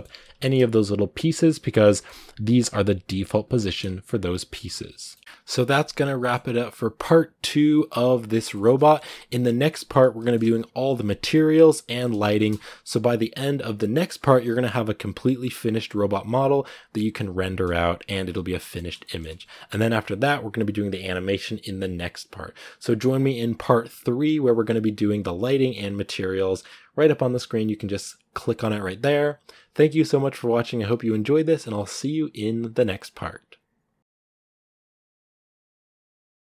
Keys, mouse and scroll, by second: 1.4 right click, 1.8-3.3 middle drag, 3.3 scroll down 1, 3.4 middle click, 4.3-4.8 scroll down 1, 4.8 right click, 5.0 middle click, 5.2 r, 6.0-10.1 middle drag, 10.1-12.1 scroll down 1, 12.1-34.0 shift+middle drag.